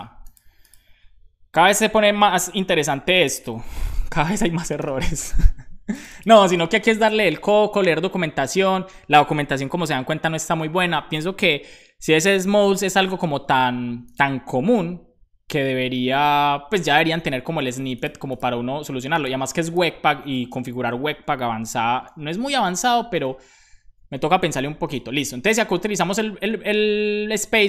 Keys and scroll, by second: 3.9-5.3 typing, 6.4 super+c, 20.4 Return, 21.9 shift+,, 22.4 super+v, 27.5-27.6 typing.